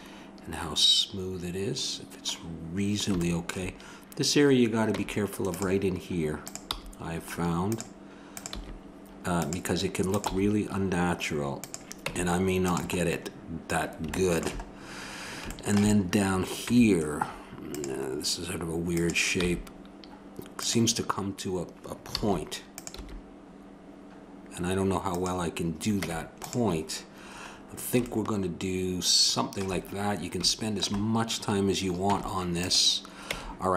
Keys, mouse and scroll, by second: 5.6 Tab, 6.4-8.2 drag, 6.7 g, 8.4-10.1 drag, 8.5 g, 10.3 g, 11.8 click, 12.1 Tab, 16.6 Tab, 18.1 middle click, 19.0-20.8 drag, 19.4 g, 22.1 a, 22.7-24.5 drag, 23.0 g, 26.0 Tab, 29.8 middle click, 32.1 Tab, 33.3 Tab.